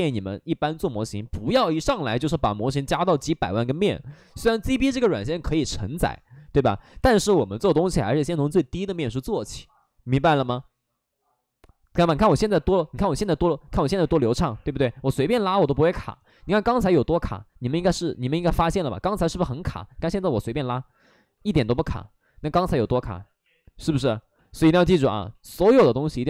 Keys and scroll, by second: 14.3 3, 21.9 ctrl+z, 22.4 ctrl+z, 22.4 ctrl+z, 22.4 ctrl+z, 22.5 ctrl+z.